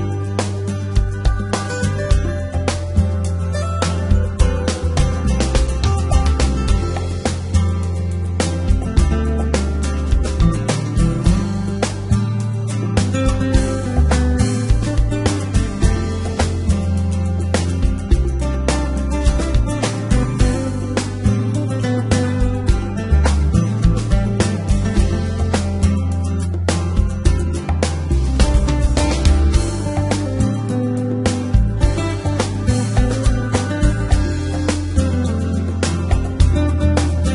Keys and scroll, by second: 3.6 e, 4.0 g, 4.4 y, 10.4 s, 11.2 x, 16.4 g, 17.0 y, 21.6 g, 22.6 y, 24.7 Tab, 31.8 g, 32.4 z.